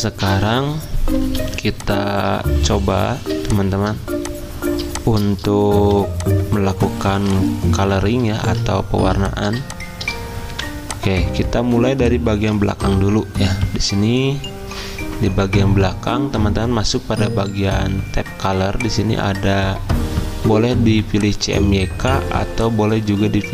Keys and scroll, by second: 1.4 z, 2.6 z, 3.3 v, 8.4 ctrl+z, 9.0 z, 10.5 typing, 12.6 ctrl+z.